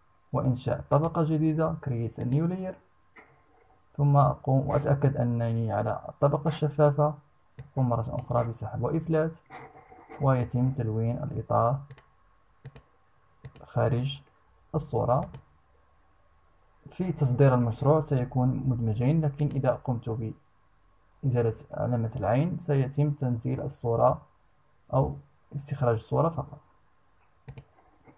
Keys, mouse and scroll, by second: 0.4 click, 1.7 click, 7.1 click, 11.4 click, 12.2 click, 13.0 click, 14.8 click, 18.9 click, 27.0 click.